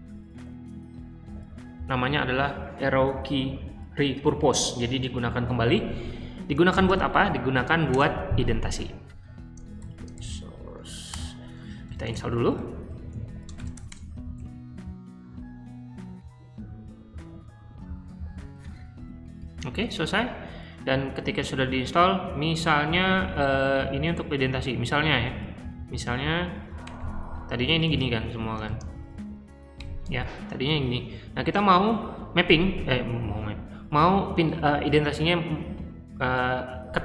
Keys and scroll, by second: 1.2 p, 6.4-7.3 typing, 7.8 Return, 9.7-13.9 typing, 19.6 q, 25.7 k, 26.8-29.7 typing.